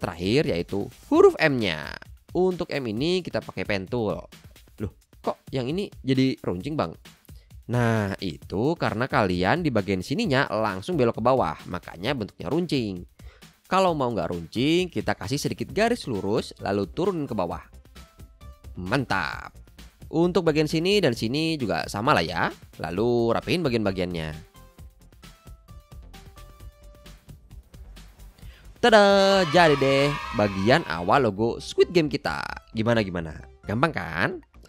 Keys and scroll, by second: 2.4 p, 14.3 super+z, 24.7 shift+a, 25.0 shift+a, 25.7 shift+Left, 26.1 Right, 27.6 Right, 28.1 Left.